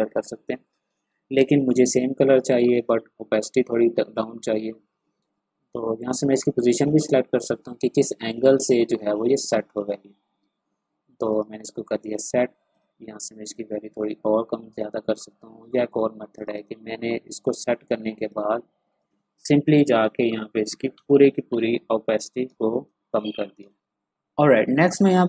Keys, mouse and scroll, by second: 1.0 ctrl+z, 4.1-12.7 drag, 12.7-16.3 drag, 20.4 1, 20.9 Return, 22.2 click, 22.4 space, 22.6 click, 23.0 space, 23.4 ctrl+scroll up 1, 25.0 scroll down 1.